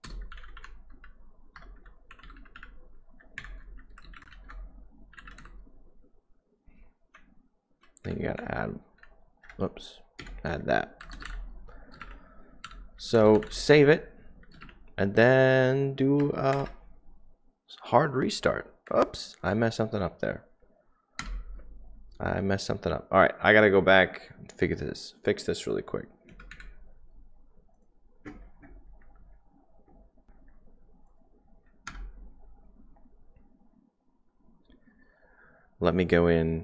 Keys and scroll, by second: 0.0-5.3 typing, 7.1 Left, 7.4 Left, 7.6-7.9 Left, 8.0 Right, 8.1-17.2 typing, 21.1 typing, 23.4-24.1 typing, 26.5 Down, 26.5 Up, 31.9 Return.